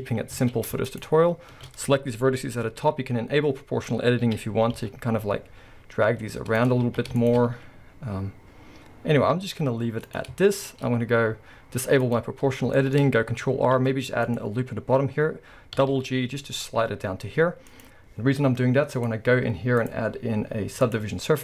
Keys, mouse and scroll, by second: 0.4 alt+a, 0.8 alt+shift+click, 4.3 g, 6.8 alt+a, 7.2 alt+shift+click, 7.6 s, 10.2 click, 10.4-12.0 shift+middle drag, 10.8-12.0 scroll, 12.0 click, 12.8-18.9 shift+middle drag, 17.6 ctrl+r, 18.9 click, 19.8-21.4 drag.